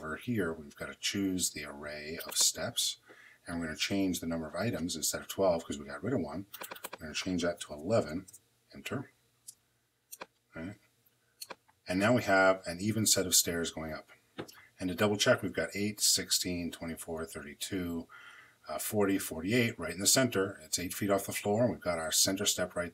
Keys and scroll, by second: 7.4 i, 8.1 Home.